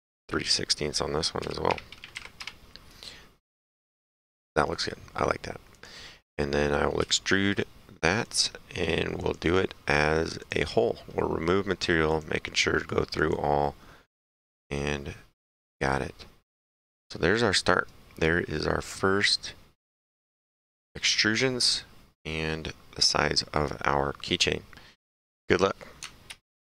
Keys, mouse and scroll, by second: 1.4 KP_3, 2.2 KP_6, 2.4 Return, 5.8 click, 6.5 right click, 7.0 s, 8.3 click, 10.4 click, 12.1 click, 13.2 click, 14.6 click, 15.6 middle click, 16.0 right click, 18.2 middle click, 19.0 right click, 20.1 middle click.